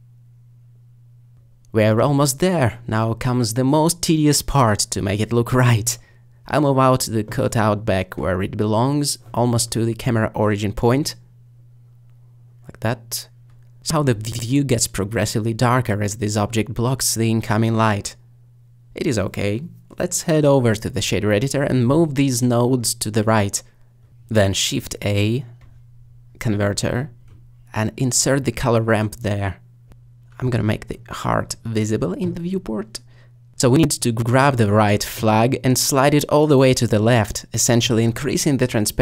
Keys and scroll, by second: 1.8 alt+shift+g, 2.5 z, 15.7 s, 19.6 g, 25.2 a.